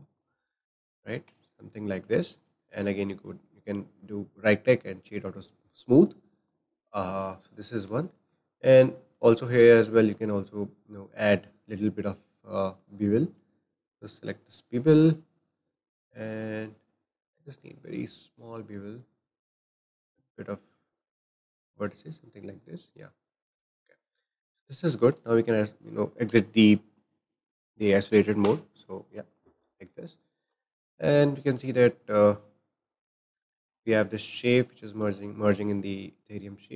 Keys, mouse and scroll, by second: 0.3-1.3 shift+middle drag, 1.3 Tab, 1.7-2.2 scroll up 3, 1.8-2.7 middle drag, 2.7 right click, 6.3-7.4 shift+middle drag, 7.4-7.8 scroll down 2, 8.0-8.4 shift+middle drag, 8.4 scroll up 3, 9.0 shift+middle click, 9.5-10.0 scroll up 5, 10.0-13.0 shift+middle drag, 13.2-15.0 drag, 15.0-15.4 scroll up 2, 16.4-21.8 drag, 21.8-22.2 scroll down 4, 22.5 shift+middle click, 22.9 right click, 23.5-23.9 drag, 23.9-24.2 scroll down 3, 24.2-27.2 middle drag, 28.4 /, 29.8-30.2 drag, 30.2-30.6 scroll down 2, 30.6-31.6 shift+middle drag, 35.0 g.